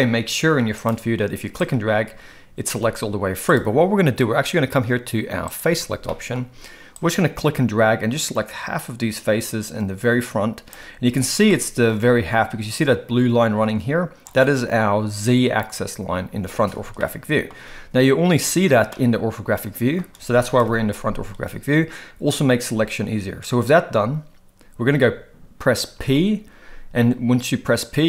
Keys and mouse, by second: 1.7 click, 5.5 click, 6.0 shift+middle click, 7.1-10.7 drag, 11.5 shift+middle click, 17.0-17.4 shift+middle drag, 18.9-20.0 middle drag, 20.6 KP_1, 25.9 p.